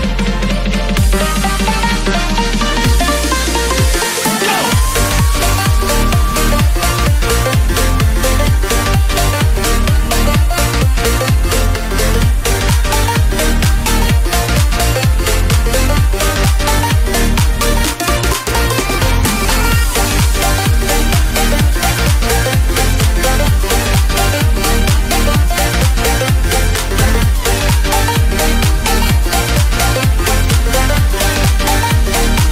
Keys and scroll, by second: 0.4 [, 28.8 Right.